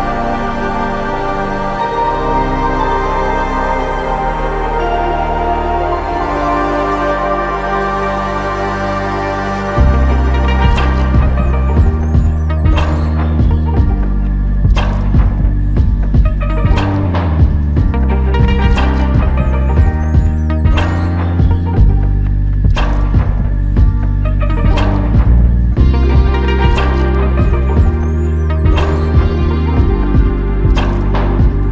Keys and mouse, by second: 0.2 alt+click, 2.9 f, 3.7 double click, 7.6 shift+click, 9.3 shift+click, 9.9 shift+click, 10.1 alt+click, 17.7 ctrl+i, 18.7 alt+click, 20.0-20.5 typing, 22.7 typing, 27.3-27.7 typing.